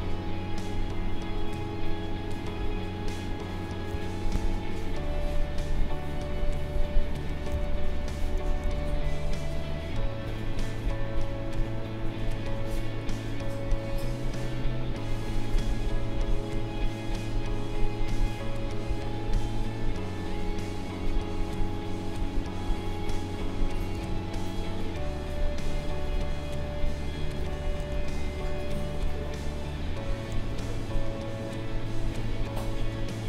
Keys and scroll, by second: 3.9 ctrl+z, 7.5 ctrl+z, 8.7 ctrl+z, 24.0 ctrl+z, 27.4 ctrl+z, 27.9 ctrl+z, 30.5 ctrl+z, 32.7 ctrl+z.